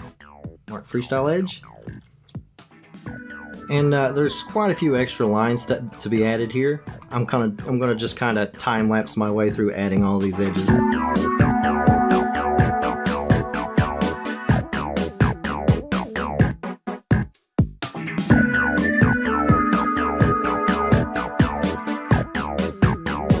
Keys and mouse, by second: 11.2 click, 11.2 Tab, 11.3 click, 11.4 shift+click, 11.5-13.7 typing, 11.7 click, 12.2 click, 12.3 Tab, 12.3 Tab, 12.3 click, 12.7 ctrl+e, 12.8 click, 13.0 click, 13.2 ctrl+e, 13.2 click, 13.4 click, 13.5 ctrl+z, 13.7 Tab, 13.8 click, 14.0 click, 14.0 Tab, 14.1 click, 14.4 click, 14.5 shift+click, 14.6 ctrl+z, 14.8-18.0 typing, 14.9 Tab, 14.9 click, 15.0 Tab, 15.1 alt+click, 15.3 shift+click, 15.4 ctrl+e, 15.4 click, 15.6 alt+click, 15.6 click, 15.8 click, 15.9 shift+click, 16.0 click, 16.1 shift+click, 16.2 click, 16.3 shift+middle click, 16.4 click, 16.5 click, 16.6 ctrl+e, 16.6 click, 16.6 Tab, 16.7 click, 16.7 shift+middle click, 16.8 shift+middle click, 16.9 Tab, 17.1 Tab, 17.2 click, 17.3 Tab, 17.3 shift+click, 17.7 shift+click, 17.9 shift+click, 18.0 click, 18.1 Tab, 18.2 shift+click, 18.3 click, 18.4 middle click, 18.5 ctrl+click, 18.7 ctrl+click, 19.1 click, 19.1 shift+click, 19.2 shift+click, 19.5 q, 19.6 Tab, 19.6 click, 19.7 Tab, 19.8 click, 19.8 click, 20.0 ctrl+e, 20.2 q, 20.3 q, 20.5 shift+click, 20.6 shift+click, 20.8 click, 20.8 ctrl+e, 20.9 Tab, 21.0 click, 21.1 shift+click, 21.2 middle click, 21.3 middle click, 21.4 Tab, 21.5 click, 21.9 Tab, 21.9-23.4 typing, 22.3 ctrl+z, 22.4 shift+click, 22.5 Tab, 22.7 Tab, 22.8 shift+click, 23.0 Tab, 23.1 shift+middle click.